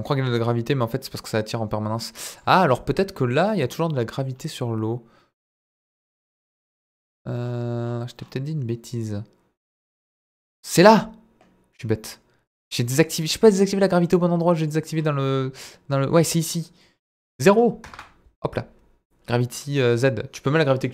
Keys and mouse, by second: 17.1-18.3 drag.